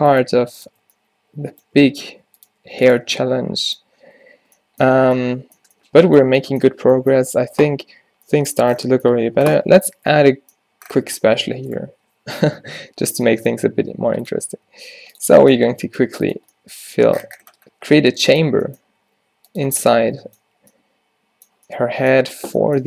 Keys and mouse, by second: 0.2 g, 0.8 Tab, 1.9 Tab, 2.2 r, 2.6 g, 3.1 Tab, 4.9 a, 10.2 Tab, 12.7 -, 13.7 e, 14.6 s, 15.8 e, 16.5 z, 19.0 g, 20.6 z.